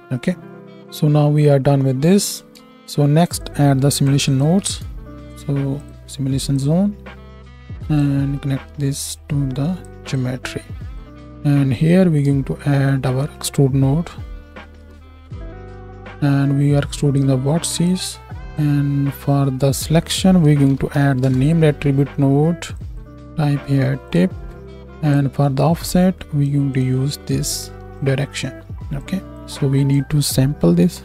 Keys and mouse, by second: 2.6 ctrl+space, 4.4-7.2 shift+drag, 4.5 shift+a, 11.9 shift+a, 13.0 ctrl+a, 15.7-16.9 drag, 22.7 click, 26.8-27.9 right drag, 27.9-29.3 drag, 29.3-31.0 right drag, 29.4-31.0 drag, 29.4-31.0 middle drag.